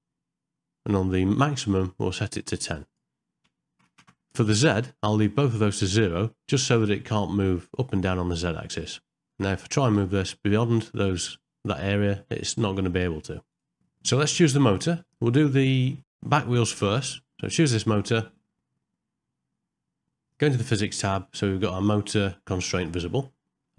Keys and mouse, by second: 2.3-4.1 drag, 16.0 middle click, 16.8 click, 21.0 middle click, 22.9 middle click.